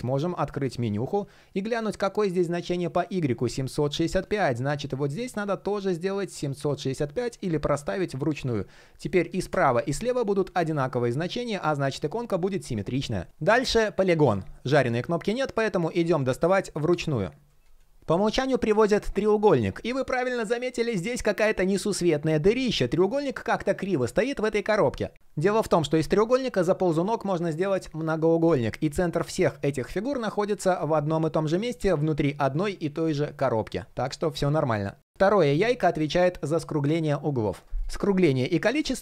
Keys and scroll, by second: 0.1 super+\, 14.2 super+\.